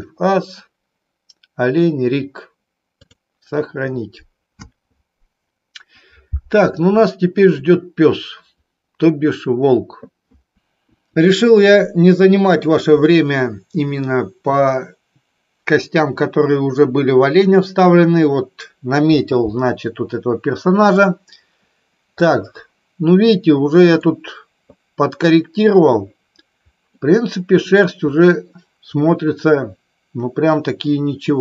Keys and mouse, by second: 22.2-24.1 middle drag, 27.0 middle click.